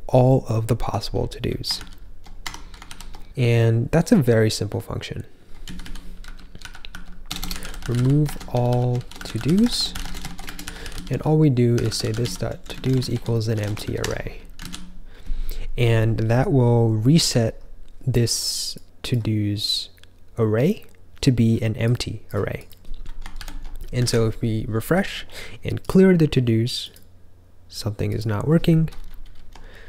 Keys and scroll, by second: 1.9 ctrl+k, 2.4 Escape, 2.8 ctrl+f, 3.2-8.2 typing, 9.7-14.2 typing, 14.5 super+s, 23.6 ctrl+j, 24.0 super+r, 29.2 ctrl+k, 29.4 ctrl+k.